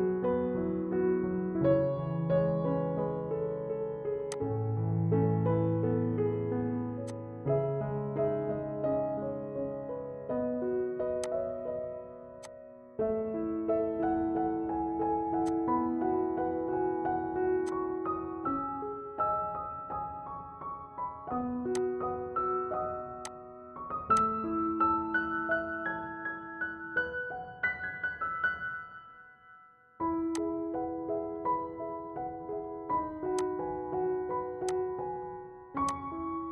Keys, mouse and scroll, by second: 0.3-0.9 scroll down 1, 0.9 scroll up 1, 3.9 click, 7.5 click, 7.5 ctrl+z, 11.3-13.9 drag, 15.5-16.7 drag, 16.8 scroll up 1, 17.7 click, 18.5 F4, 21.8 click, 24.4 click, 25.5 ctrl+z, 30.4 click, 33.4 click.